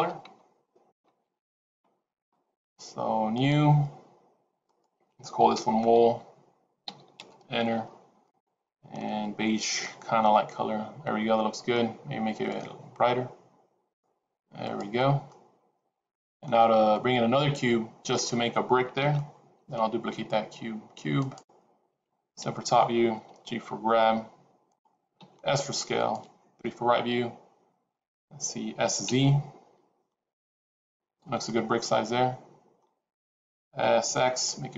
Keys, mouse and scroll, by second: 3.2 click, 4.6 click, 6.9 l, 8.2 click, 15.2 middle click, 18.9 shift+a, 22.3 KP_7, 23.2 g, 25.1 s, 26.5 KP_3, 28.8 s, 31.4 middle click, 33.7 s.